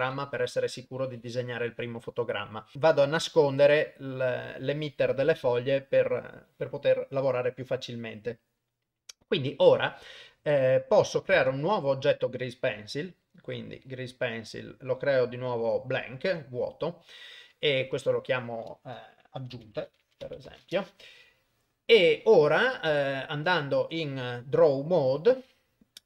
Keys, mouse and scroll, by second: 3.4 click, 11.7 shift+a, 18.0 click, 18.2 click, 20.0 g, 23.5 ctrl+Tab.